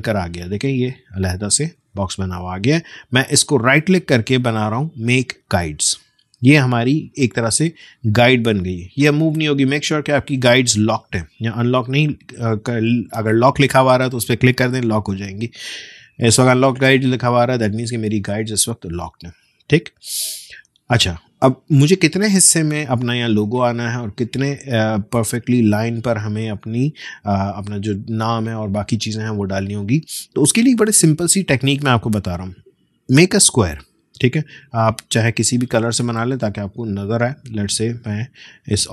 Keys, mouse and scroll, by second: 1.8 ctrl+z, 3.0 right click, 5.4 click, 9.4 right click, 18.5 click, 32.7 click, 36.1 click.